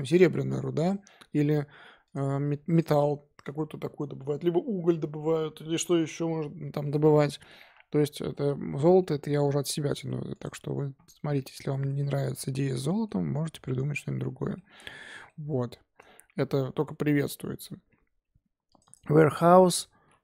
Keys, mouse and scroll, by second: 0.8 click, 1.6-1.9 scroll up 1, 2.0 click, 2.7 click, 8.5-9.0 scroll down 3, 9.0-10.3 middle drag, 10.3 click, 10.9-11.4 scroll up 2, 11.4-11.9 middle drag, 11.9 scroll down 1, 12.0-12.5 scroll up 6, 12.5-14.7 middle drag, 13.2-13.8 scroll down 2, 13.8-14.1 scroll down 2, 14.7 scroll down 4, 15.0 middle click, 15.4-18.5 scroll up 4, 18.7 click, 18.8-20.2 drag.